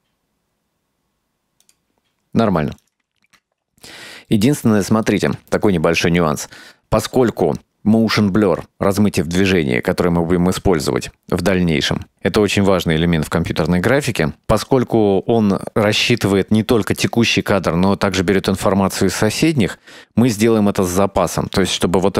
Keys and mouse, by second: 1.7 click, 2.5 space, 2.9 right click, 4.4 middle click, 5.3 shift+middle click.